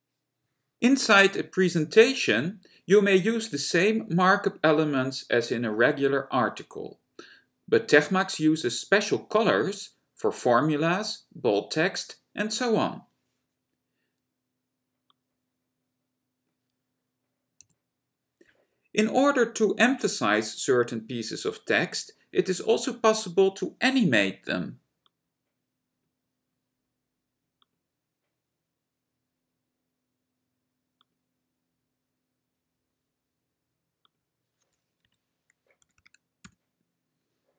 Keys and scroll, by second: 17.7 F6.